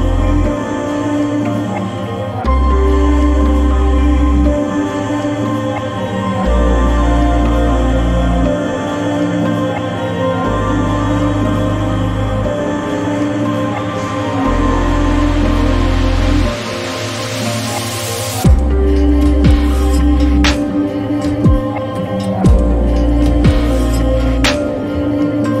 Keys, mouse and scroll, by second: 24.6 click, 24.7 click.